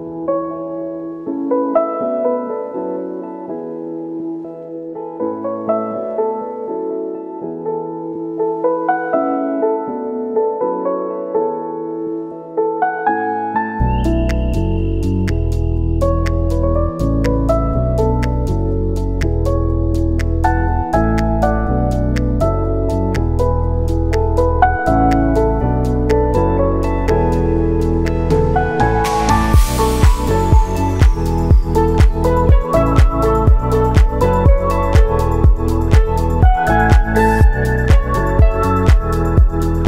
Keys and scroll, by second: 3.2 space, 3.7 ctrl+s, 5.0 ctrl+a, 7.7 ctrl+s, 10.8 ctrl+s, 28.3 ctrl+shift+d.